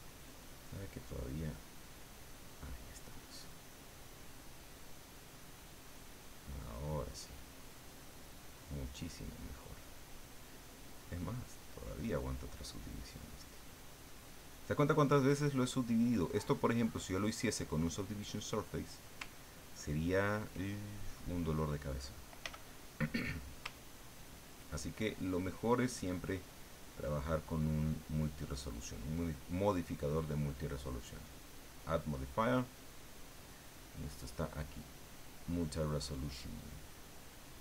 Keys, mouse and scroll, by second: 1.9 click, 3.6-6.2 drag, 6.4 click, 7.3-9.4 drag, 11.5 click, 12.9-14.8 drag, 15.0-16.7 drag, 16.9-19.0 drag, 19.4 ctrl+click, 22.4 f, 23.3 click, 23.9-26.2 ctrl+drag, 26.3-29.1 ctrl+drag, 31.5 click, 32.1 click, 36.8 click.